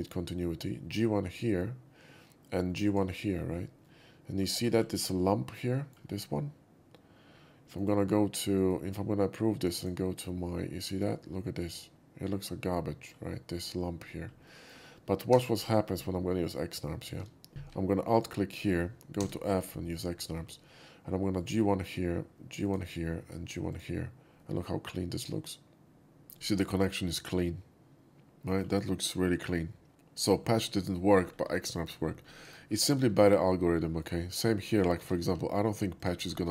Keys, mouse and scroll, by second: 1.4 click, 2.9 click, 3.9-4.4 middle drag, 4.6 shift+middle click, 4.8 scroll up 1, 5.0-6.0 shift+middle drag, 7.8 right click, 8.6 right click, 9.8 click, 10.6-13.1 middle drag, 14.5 middle click, 15.4 3, 15.7 click, 17.1 shift+x, 17.5 2, 18.2 alt+2, 18.2 click, 19.2 f, 20.0 click, 21.4 click, 22.7 click, 23.8 click, 24.4-26.2 middle drag, 26.4-28.7 middle drag, 29.5 right click, 29.9-30.3 middle drag, 30.5 scroll down 2, 31.4 scroll down 2, 31.8 shift+middle click, 32.1 scroll down 2, 32.3 shift+middle drag, 32.8 shift+middle click, 33.9 shift+middle click, 34.3 shift+middle click, 35.0 2, 36.0 click, 36.3 middle click.